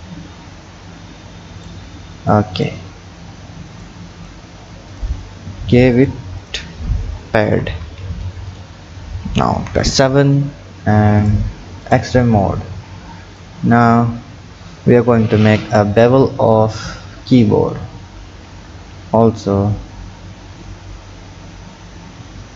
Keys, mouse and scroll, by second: 2.6 click, 3.0-3.8 scroll down 2, 3.8-5.1 drag, 6.0 drag, 6.5-8.6 drag, 9.6 KP_7, 11.2 click, 11.9 click, 12.5-13.4 scroll down 4, 13.4-16.4 drag, 18.2 shift+a.